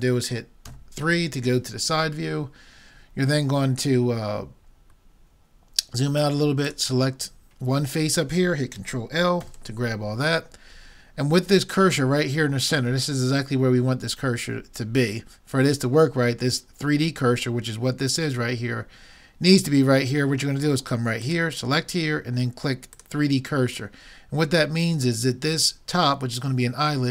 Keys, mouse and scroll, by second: 0.7 KP_3, 6.7-8.4 drag, 8.4 middle click, 9.5 ctrl+l, 21.3-23.1 drag.